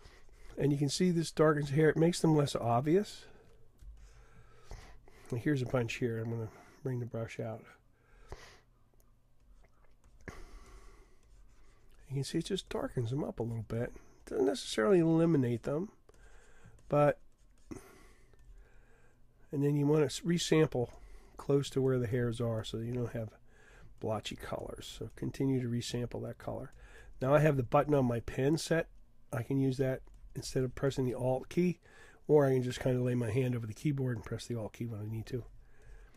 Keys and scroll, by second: 6.2 ], 7.5 ].